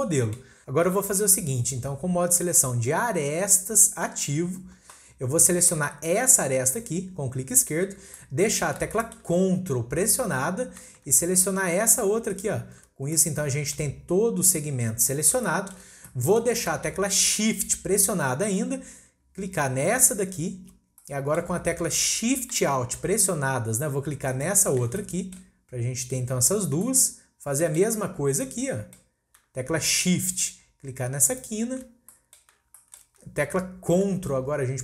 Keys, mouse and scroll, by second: 0.6-1.0 scroll up 2, 1.0 click, 7.5 click, 8.0 scroll down 1, 8.2-9.7 middle drag, 9.7-12.3 scroll up 1, 12.3 ctrl+click, 13.1-19.8 middle drag, 20.0 shift+click, 20.8 scroll down 1, 21.0-23.2 middle drag, 24.3 alt+shift+click, 25.0-26.6 middle drag, 26.6 scroll down 1, 26.8-28.3 middle drag, 28.3 scroll up 1, 28.4-31.3 middle drag, 31.3 shift+click, 31.9 scroll down 1, 32.1-34.8 middle drag.